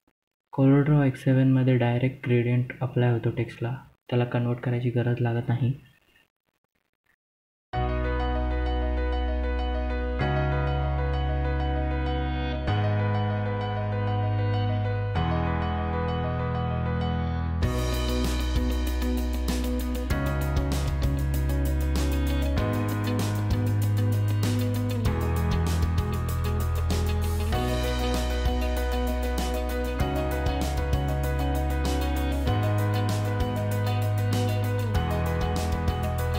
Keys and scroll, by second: 2.7 F2, 8.2 ctrl+q, 15.3 F11, 28.3 Delete, 29.7 ctrl+z, 32.5 i, 34.2 i.